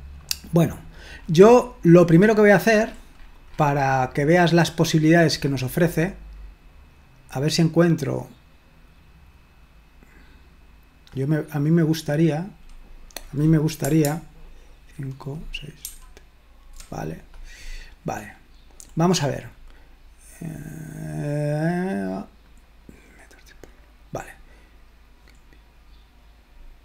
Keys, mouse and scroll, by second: 0.0 click, 0.8-4.1 scroll up 2, 4.9-11.6 drag, 12.8 click, 16.0 super+/, 18.3-20.1 scroll up 1, 22.5 click, 25.8-26.8 scroll up 1.